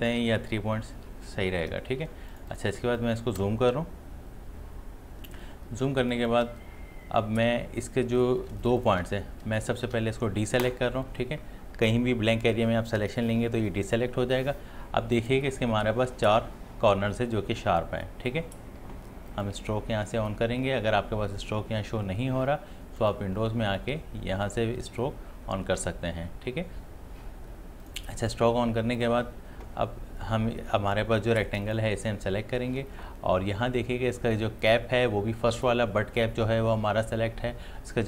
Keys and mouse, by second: 2.1 ctrl+space, 2.4 ctrl+click, 2.6 ctrl+space, 3.0 click, 3.3 space, 5.9 space, 6.6 click, 8.5 ctrl+space, 8.6 ctrl+click, 9.5 space, 9.6 click, 19.3 click, 23.0 click, 27.8 click, 31.6 click.